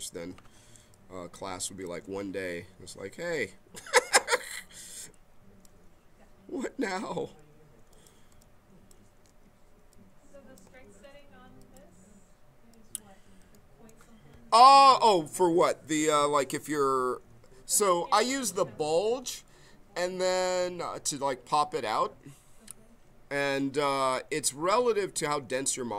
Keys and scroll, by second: 0.8 b, 3.2 b, 10.7 ctrl+z.